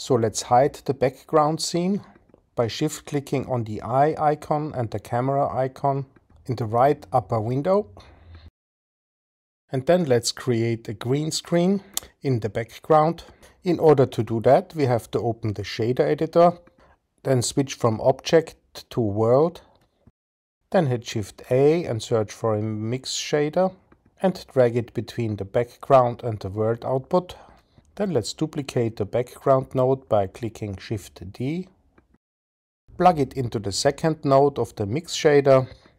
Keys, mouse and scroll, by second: 6.2 shift+click, 8.6 shift+click, 9.5 click, 16.3-17.0 drag, 17.8 click, 20.2 click, 20.8 shift+a, 29.8 click, 31.8 shift+d, 34.4-35.7 drag.